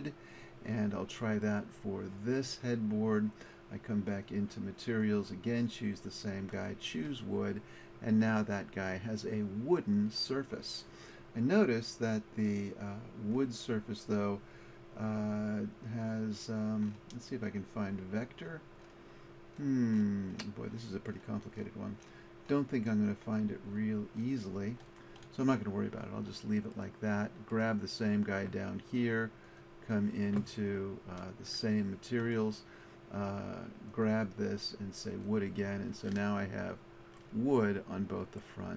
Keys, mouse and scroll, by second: 0.0 click, 13.4-15.6 drag, 26.3-28.4 drag.